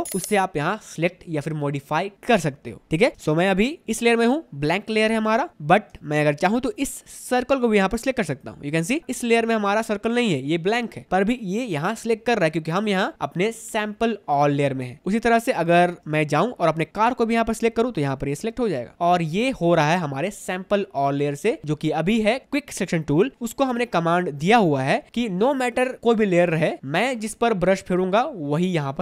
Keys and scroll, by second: 3.3 space, 6.1 space, 15.9 space, 19.8 space.